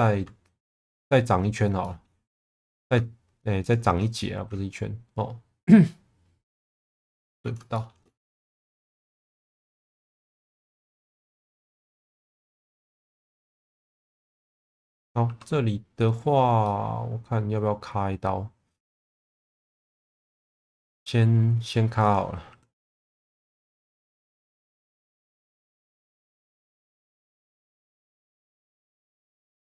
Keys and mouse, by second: 1.0 middle click, 1.8 middle click, 2.6 middle click, 3.6 ctrl+click, 4.1-7.2 middle drag, 7.7 shift+middle click, 8.4 e, 8.7 z, 9.4 click, 9.9 1, 10.3 click, 11.3 g, 11.4 b, 12.0 click, 12.7 click, 13.2 middle click, 15.2 2, 16.6-19.2 middle drag, 20.1 2, 22.4 1, 22.9 click, 23.6 shift+click, 24.4 s, 24.5 KP_0, 24.7 KP_Enter, 25.4 alt+middle click, 26.1 shift+middle click, 27.3 click, 28.4 s, 28.9 z, 29.2 KP_0, 29.3 KP_Enter.